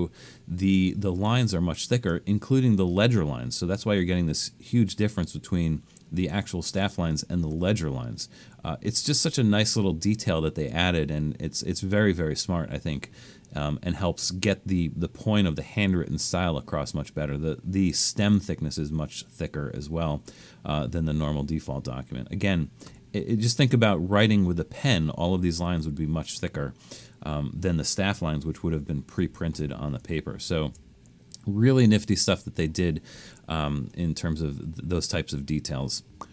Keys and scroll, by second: 28.8 super+-, 29.2 super+-, 29.6 super+-, 30.0 super+-, 30.5 super+-.